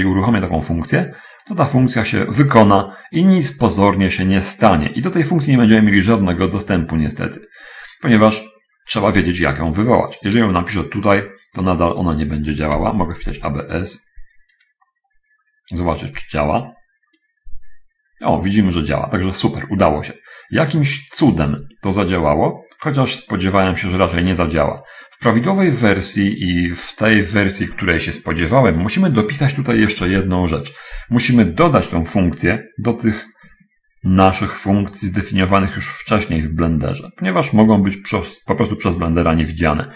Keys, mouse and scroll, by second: 1.5 click, 12.0 click, 13.1 BackSpace, 14.9 click, 16.7 right click, 17.6-25.1 drag, 26.4 click, 28.9 click, 30.0 Return, 37.5-38.7 drag.